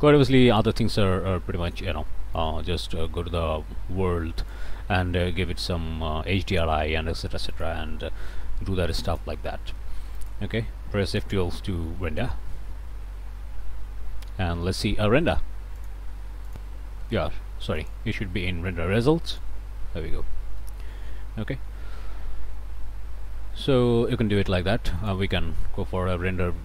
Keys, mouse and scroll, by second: 2.4 click, 4.4 click, 7.5 click, 9.1 click, 10.2 click, 12.0 F12, 14.0 scroll down 2, 14.7 scroll down 2, 15.8 click, 16.6 click, 17.8 click, 19.3 click, 20.2 middle click, 20.2 scroll up 1, 20.6 click, 21.1 middle click, 21.1-21.8 scroll up 2, 21.6 middle click, 22.1 middle click, 22.8 middle click, 25.0 click, 26.0 8.